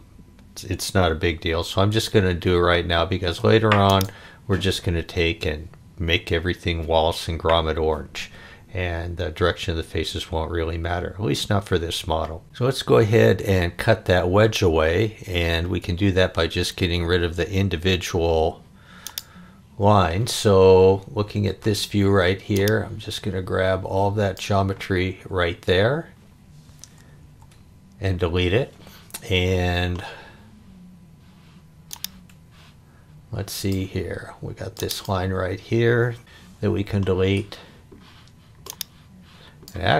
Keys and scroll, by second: 1.3 super+z, 27.2 Delete, 36.2 Delete.